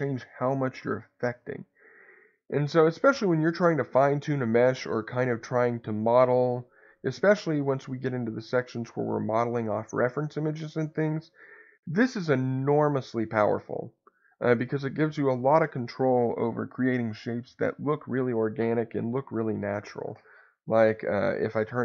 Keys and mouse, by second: 21.4 Escape.